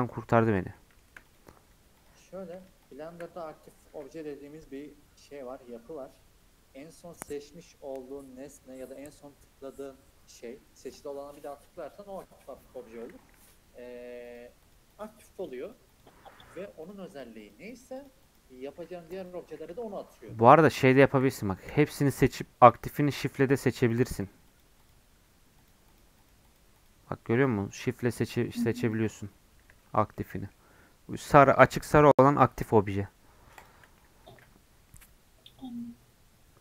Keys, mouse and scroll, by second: 1.3-3.8 drag, 3.8 ctrl+l, 13.4-19.6 shift+drag, 19.6-20.0 scroll down 2, 20.0-21.7 middle drag, 21.7 a, 22.2 scroll up 3, 23.1 shift+click, 23.5-27.4 shift+drag, 28.2-29.6 shift+drag, 30.2-33.2 middle drag, 33.5 click, 33.9-36.6 middle drag.